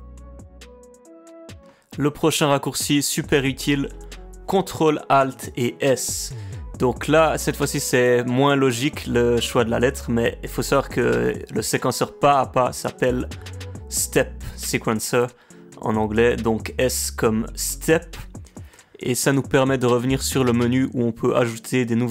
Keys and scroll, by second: 1.5 ctrl+alt+s.